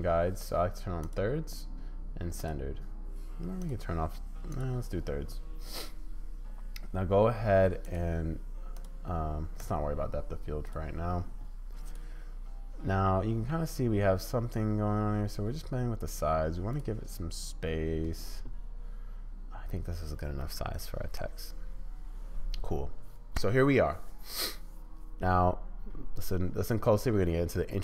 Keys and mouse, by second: 1.0 click, 2.4 click, 3.6 click, 7.8 click, 8.7 click, 9.6 click, 11.8 click, 13.5 s, 20.7 click.